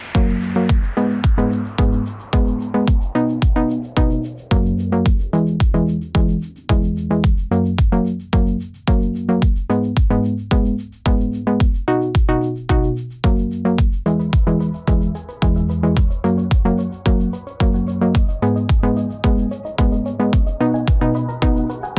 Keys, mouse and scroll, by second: 2.5-3.9 typing, 5.8 right click, 12.4 right click.